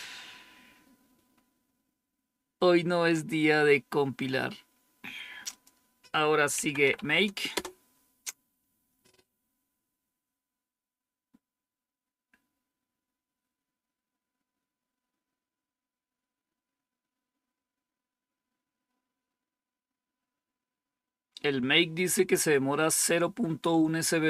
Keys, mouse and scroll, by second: 1.2-2.1 scroll up 1, 5.4 click, 6.2-7.3 typing, 7.4 Return, 10.3-11.0 scroll down 1, 21.2-22.0 scroll up 2.